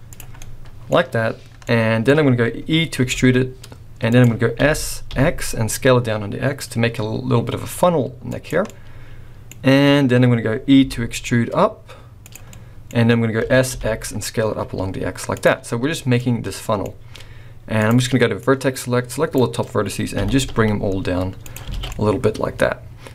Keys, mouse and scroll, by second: 0.4 middle click, 1.6 middle click, 2.2-3.0 scroll down 2, 3.0 e, 4.5 s, 8.7 middle click, 9.0 middle click, 10.5 scroll down 1, 10.8 e, 12.5 middle click, 13.4 s, 16.2 middle click, 17.8 click, 18.3 click, 20.1 g, 21.7 alt+a, 21.9 middle click.